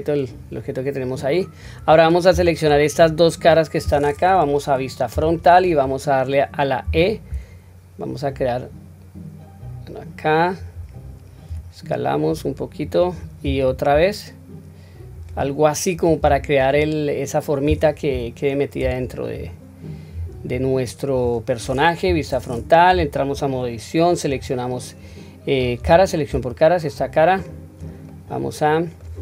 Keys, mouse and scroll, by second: 0.2 scroll up 1, 0.2-0.9 middle drag, 2.2 3, 5.1 KP_1, 5.8 scroll down 1, 6.4-6.8 scroll down 1, 6.8 e, 16.1 Tab, 16.7-18.0 scroll down 2, 18.0 /, 18.7-19.2 scroll down 1, 19.2 scroll down 1, 19.8-20.2 scroll down 3, 20.1-21.2 scroll up 4, 22.0 KP_1, 22.8 Tab, 24.2 click, 25.7 3, 26.3 click, 27.3 click, 28.0-29.0 middle drag.